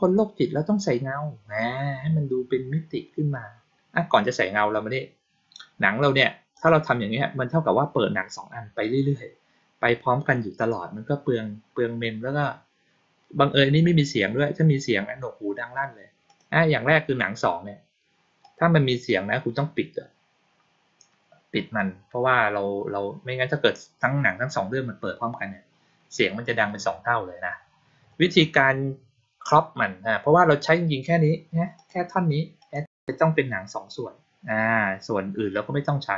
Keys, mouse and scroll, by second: 6.4 click, 16.2 click, 18.3 click, 31.7 click, 32.5 click.